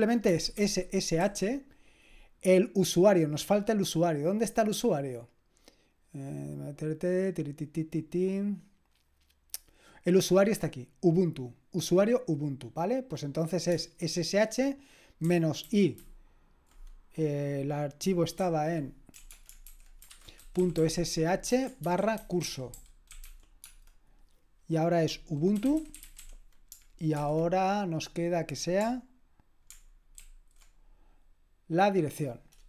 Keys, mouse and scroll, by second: 0.3-1.2 typing, 11.3-12.4 drag, 12.9 click, 13.7 space, 15.4-16.1 typing, 19.4-23.7 typing, 25.3-27.1 typing, 30.2 ctrl+alt+v.